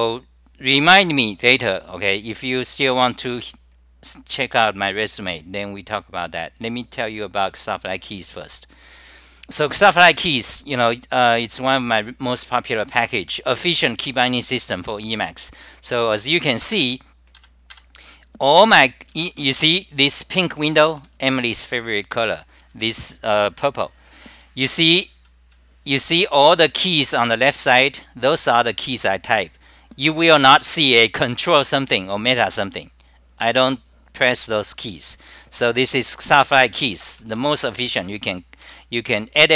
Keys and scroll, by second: 17.6-19.4 typing, 17.8 scroll down 2, 18.6 ctrl+g, 21.0 d, 21.2 d, 21.4 d, 23.4 scroll down 2, 25.5 scroll down 2, 28.2 scroll down 2, 31.2 scroll down 2, 37.2-39.5 typing.